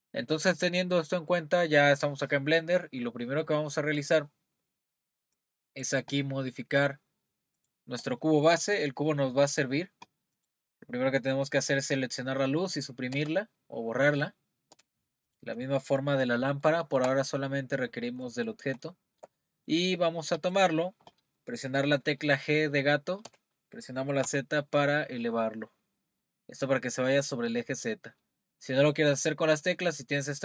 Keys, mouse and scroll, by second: 9.5 click, 10.4 click, 13.1 Delete, 14.1 click, 14.7 Delete, 15.2 click, 15.7-16.4 scroll down 1, 16.4 scroll down 2, 16.6-20.3 shift+middle drag, 20.3 click, 23.2 g.